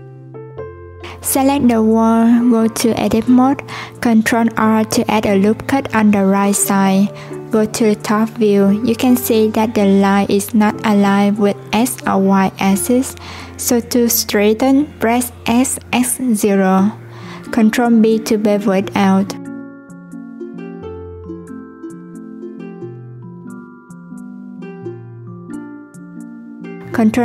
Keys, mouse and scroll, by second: 0.0 click, 3.1 ctrl+r, 5.8 click, 7.5-10.5 drag, 11.5 s, 16.0 ctrl+b, 21.5 click, 22.1 click, 23.7 ctrl+z.